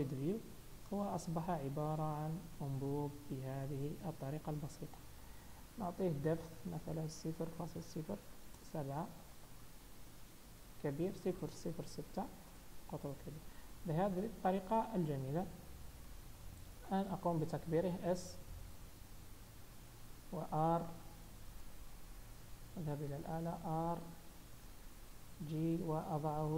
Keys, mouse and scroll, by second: 0.1-0.4 scroll up 3, 0.4 middle click, 1.1-1.6 scroll down 3, 1.5 middle click, 5.6-6.7 scroll down 2, 6.7 click, 9.9 middle click, 11.2 click, 14.0-14.4 scroll down 3, 14.4 middle click, 16.2 KP_1, 17.0 scroll down 2, 18.0 s, 20.5 r, 22.3 KP_7, 23.5 r, 25.1 g, 26.4 middle click.